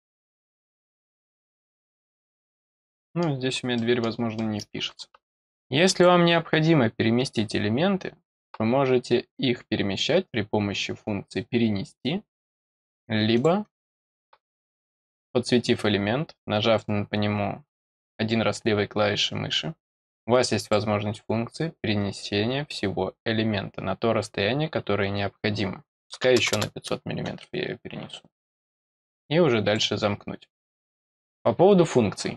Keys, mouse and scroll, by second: 0.0 scroll down 1, 0.7-1.7 scroll up 3, 2.0 scroll down 1, 2.7 middle click, 3.7 middle click, 4.3 scroll up 2, 5.3-5.8 scroll up 1, 5.8 middle click, 5.8 click, 7.2-8.4 drag, 13.3 click, 17.8 click, 20.6 click, 28.3 click, 29.1 click, 30.8 click.